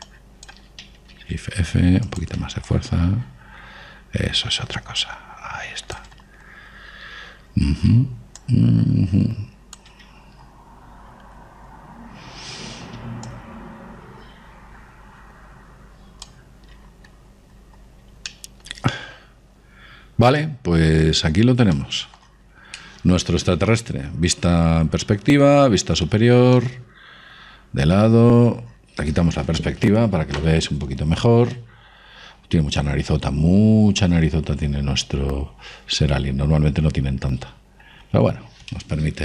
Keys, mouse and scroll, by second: 1.4 click, 2.4 shift+f, 4.0 click, 7.5-8.9 scroll up 1, 8.9-10.7 middle drag, 9.8 click, 11.5-12.4 scroll down 1, 12.4-14.6 middle drag, 14.6 click, 19.6-24.8 middle drag, 26.4-29.7 middle drag, 32.2 KP_5, 32.9-34.5 middle drag.